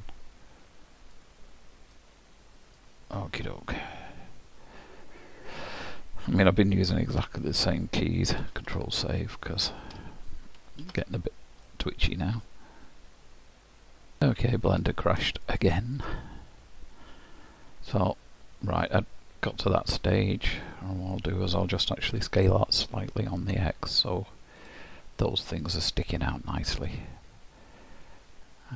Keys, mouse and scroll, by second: 1.1 click, 7.2 Tab, 8.6 ctrl+s, 8.7 ctrl+a, 10.9 ctrl+s, 11.7 middle click.